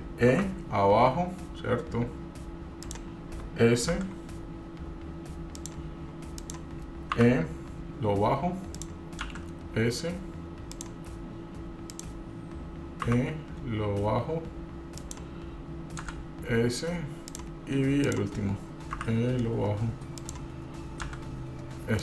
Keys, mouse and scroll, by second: 0.5 e, 4.1 s, 6.5 click, 7.3 e, 9.6 s, 12.1 click, 13.2 e, 17.6 s, 18.2 click, 19.1 e, 21.6 s.